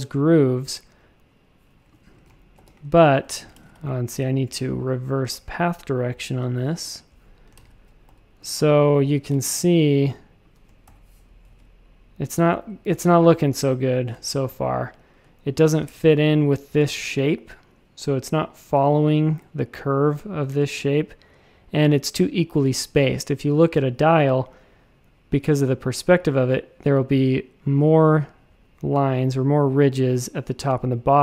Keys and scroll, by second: 2.5 alt+super+b, 3.5 shift+super+a, 7.5 shift+super+a, 8.0 v, 8.5 a, 10.8 shift+super+[, 11.4 shift+super+a, 12.9 v, 15.8 shift+super+a.